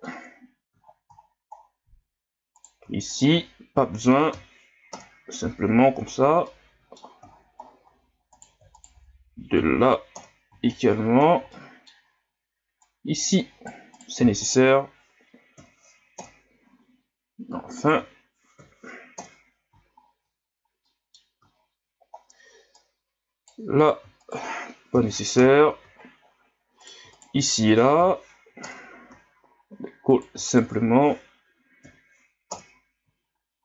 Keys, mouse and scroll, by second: 0.5-0.8 scroll down 1, 0.8 ctrl+scroll up 3, 1.2-1.7 shift+scroll down 10, 2.6-3.0 right drag, 3.1-4.3 shift+right drag, 4.3 m, 5.7-6.2 shift+scroll down 6, 6.5-7.3 middle drag, 7.3-8.3 shift+scroll down 13, 8.3 right click, 8.8 shift+right click, 9.5 m, 10.9-11.3 shift+scroll down 10, 11.5 middle click, 12.2-12.9 scroll up 1, 12.9-14.0 right drag, 14.5-15.6 shift+right drag, 15.6 m, 17.8 shift+right click, 18.6 m, 20.0-20.4 shift+scroll down 6, 20.8 middle click, 21.6-22.1 ctrl+scroll down 1, 22.1-22.8 scroll up 2, 22.8 right click, 23.8-24.3 right drag, 24.9 m, 26.2-26.8 ctrl+scroll down 2, 26.8-27.2 shift+right drag, 28.0 m, 29.4 ctrl+scroll down 5, 30.1 right click, 30.5 shift+right click, 31.8 m, 33.3-33.6 ctrl+scroll down 11.